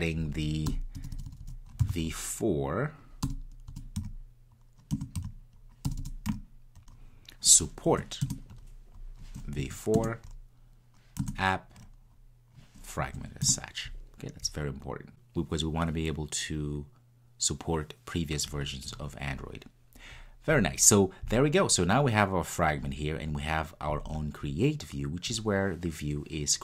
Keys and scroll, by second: 5.0 Return, 8.4 Return, 11.0 Return.